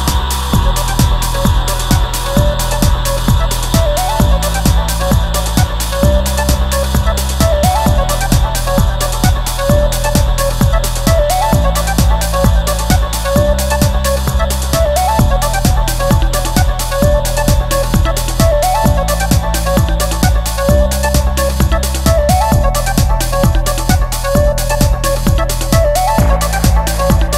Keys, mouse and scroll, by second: 26.0 F12.